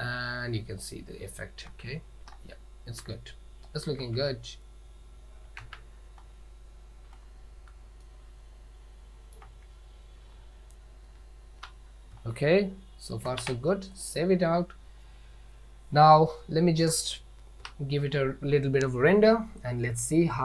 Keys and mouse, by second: 1.8 ctrl+z, 4.2 ctrl+z, 5.8 ctrl+shift+z, 8.2-9.6 ctrl+middle drag, 10.4 z, 13.3 ctrl+s.